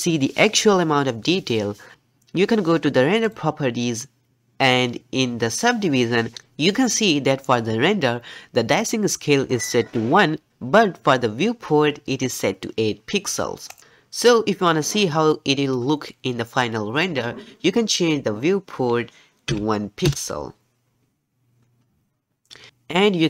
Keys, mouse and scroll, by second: 3.2 click, 13.7 click.